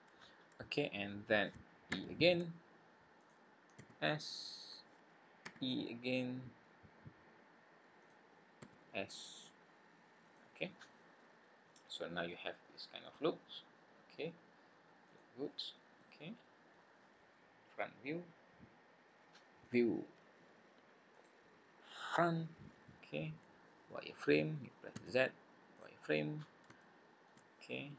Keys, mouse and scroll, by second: 0.2-1.0 scroll up 1, 1.9 e, 3.7 s, 5.4 e, 8.6 s, 10.7-11.5 scroll down 7, 11.7 middle click, 13.0 click, 13.6 scroll up 2, 15.1 click, 15.9 middle click, 19.6 click, 22.6-23.0 scroll up 4, 24.9 z, 26.7 shift+middle click, 27.5-27.9 scroll down 6.